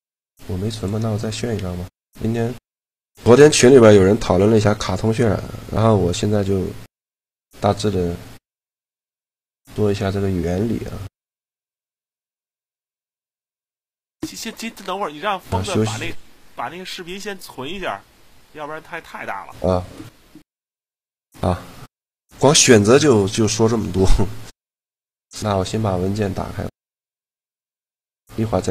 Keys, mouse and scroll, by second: 0.5-2.2 drag, 24.9-26.0 drag.